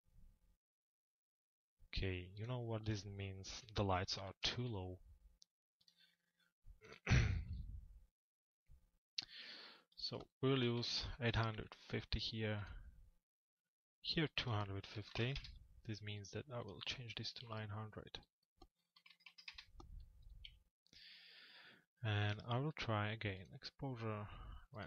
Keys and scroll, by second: 3.2 p, 15.0 Return, 19.2 Return, 20.4 c.